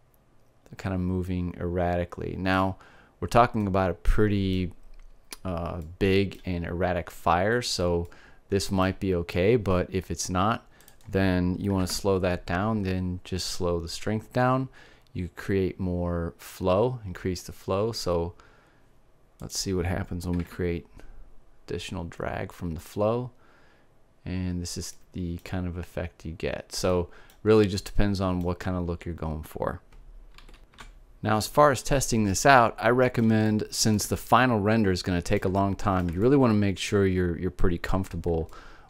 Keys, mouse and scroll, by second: 1.6 middle click, 4.3 middle click, 6.2 middle click, 7.2 middle click, 8.4 middle click, 11.4-12.8 drag, 20.0-21.8 drag, 25.6-27.3 middle drag, 27.6 middle click, 31.1 alt+a, 33.3-35.2 middle drag.